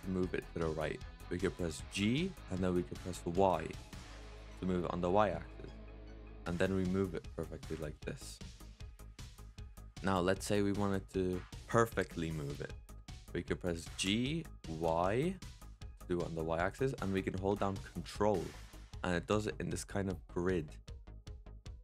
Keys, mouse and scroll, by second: 1.8 g, 9.7 ctrl+z, 13.8 g.